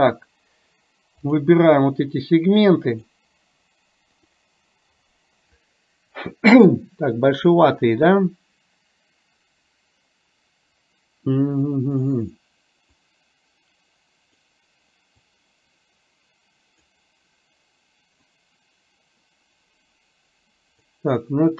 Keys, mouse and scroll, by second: 3.0 click, 13.0 click, 15.4 click, 18.3 click.